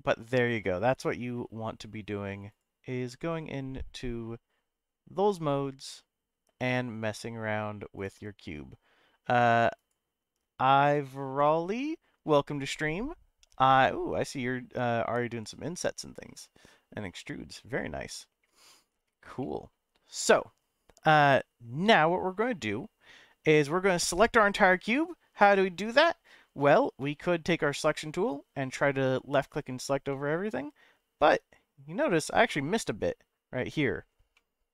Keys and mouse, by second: 17.5-18.9 middle drag, 19.4 middle click, 24.1-26.0 middle drag, 28.3-29.4 drag, 30.2-32.2 middle drag, 34.3 middle click.